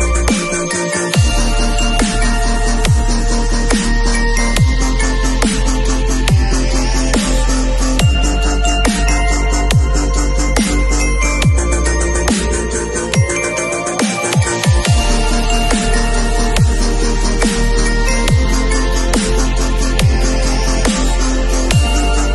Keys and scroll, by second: 21.4 shift+v.